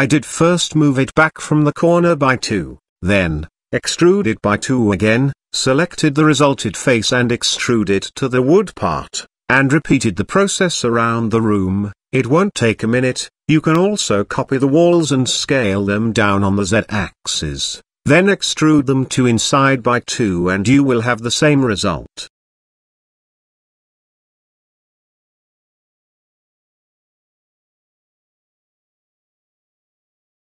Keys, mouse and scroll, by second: 0.2 middle click, 0.9 middle click, 2.1 click, 2.9 click, 3.2 middle click, 3.9 e, 5.9 click, 6.7 middle click, 7.1 shift+middle click, 7.8 middle click, 8.1 shift+middle click, 8.8 e, 10.2 shift+middle click, 10.6 middle click, 11.0 shift+middle click, 11.9 e, 15.1 ctrl+z, 15.7 z, 16.2 shift+middle click, 16.8 e, 20.7 click, 21.5 g, 23.2 g, 24.1-24.4 scroll up 1, 24.4 middle click, 24.7 scroll up 1, 24.9 middle click, 26.1 click, 27.0 click, 27.5 e, 28.1 e.